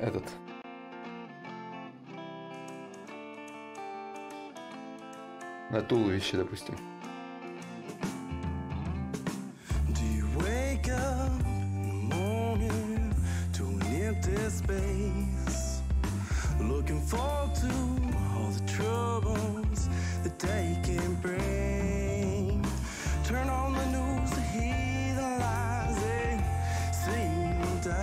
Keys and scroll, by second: 9.3 space, 12.7 space.